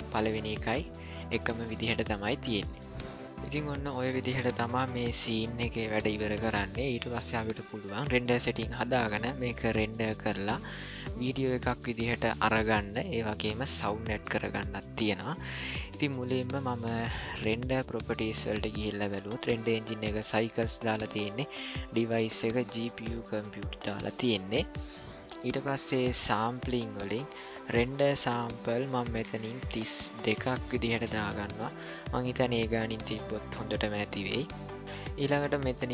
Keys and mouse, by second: 17.4 click, 28.5-31.8 drag.